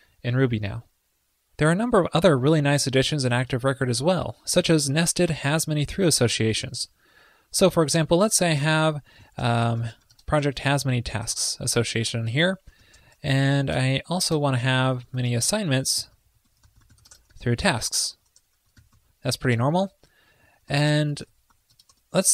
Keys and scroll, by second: 6.6 super+\, 7.1 super+Return, 12.3 super+Return, 18.3 ctrl+l, 19.6 super+Return.